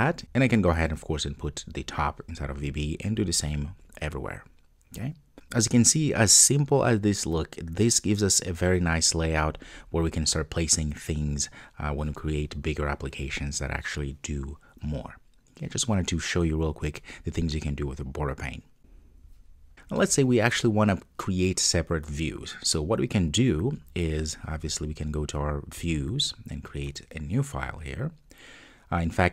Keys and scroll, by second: 0.2 super+x, 1.8 super+v.